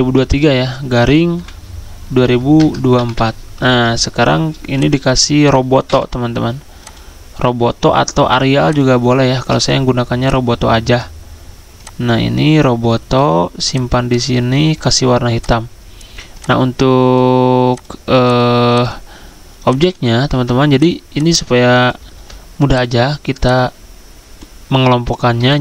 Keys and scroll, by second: 0.0-4.1 typing, 5.6-6.3 typing, 20.3 ctrl+z, 22.1 ctrl+z.